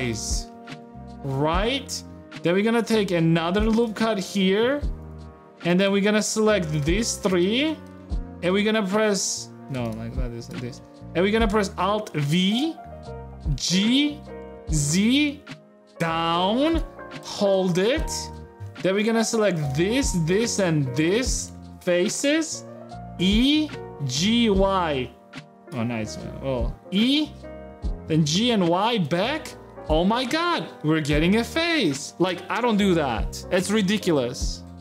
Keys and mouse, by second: 0.3 a, 0.5 click, 0.8 shift+click, 1.4 click, 2.5 ctrl+r, 4.4 ctrl+Tab, 5.0 a, 6.5 shift+click, 7.5 middle click, 7.7 shift+middle click, 8.1 middle click, 12.1 alt+v, 17.3 a, 17.6 click, 18.0 shift+click, 18.4 ctrl+Tab, 21.1 middle click, 21.5 shift+middle click, 21.8-25.4 drag, 25.4 e, 28.8 g, 29.0 a, 29.3-31.5 drag, 31.5 Tab.